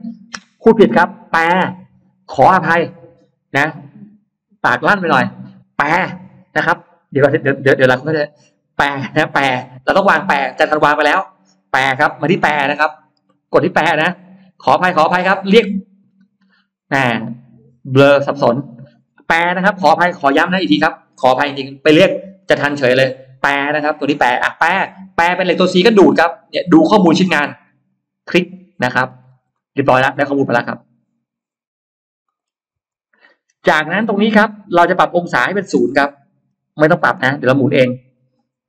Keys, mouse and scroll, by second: 13.8 click, 27.7 click, 28.9 scroll down 1, 29.4 middle click, 31.7-32.0 scroll down 1, 32.1 middle click, 32.3 scroll down 1, 32.8 Escape, 33.3-33.7 scroll up 2, 33.8 middle click, 35.1 click, 36.7 o.